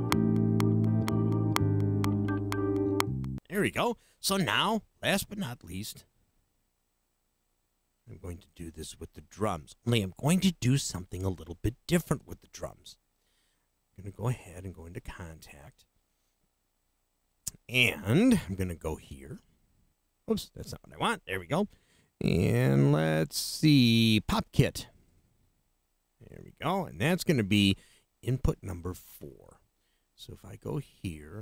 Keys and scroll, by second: 3.3 space.